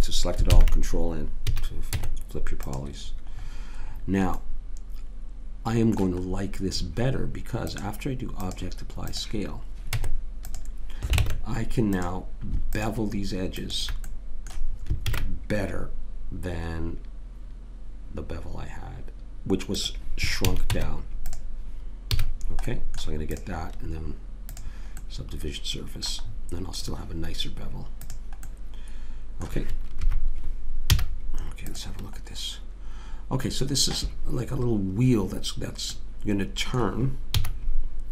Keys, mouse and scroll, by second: 0.5 ctrl+n, 1.5 a, 1.9 Tab, 9.2 click, 9.9 Tab, 11.2 ctrl+Tab, 12.8 click, 15.1 ctrl+b, 20.5 a, 20.7 Tab, 22.2 a, 22.7-25.4 middle drag, 25.4 click, 26.3 right click, 26.4-28.0 middle drag, 28.0 click, 28.5 right click, 29.3 right click, 30.0 KP_3, 30.9 z, 37.3 z.